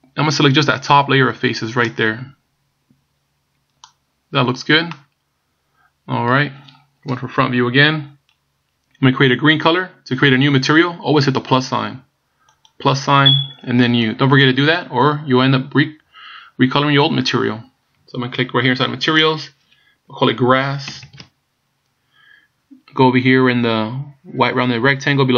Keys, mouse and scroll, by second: 5.0 middle click, 7.1 KP_1, 12.6 click, 13.8 click, 19.2 click, 21.0 s.